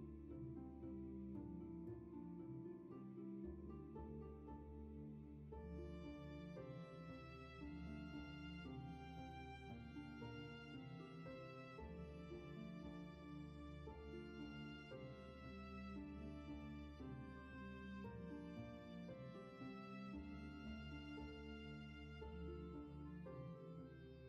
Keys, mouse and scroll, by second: 13.3 space.